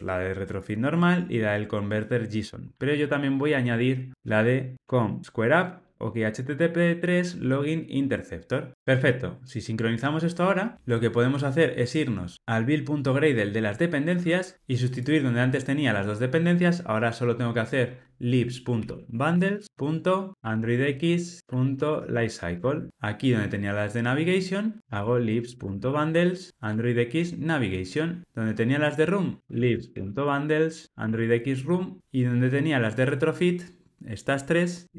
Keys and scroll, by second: 7.4 Tab, 26.6 Tab, 30.9 Tab.